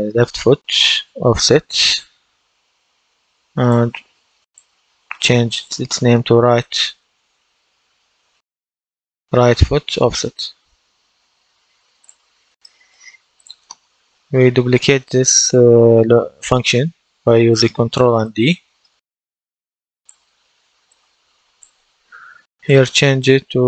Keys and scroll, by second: 1.6 BackSpace, 4.8 BackSpace, 6.8-9.1 typing, 9.8 Return, 16.5 ctrl+d, 23.0-23.6 typing.